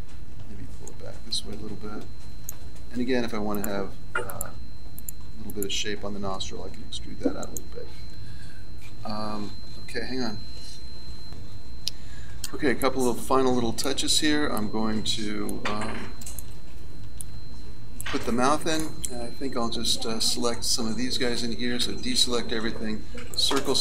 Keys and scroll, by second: 6.7 e, 21.8 a, 22.6 c.